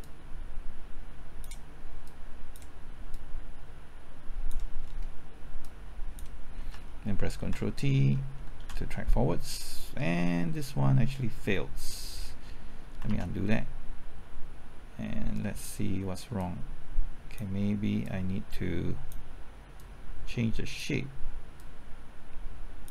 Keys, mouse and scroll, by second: 0.0-4.5 drag, 4.7-5.6 scroll down 1, 5.6 click, 6.6 typing, 8.5 ctrl+t, 13.0 ctrl+z, 16.3-22.9 drag.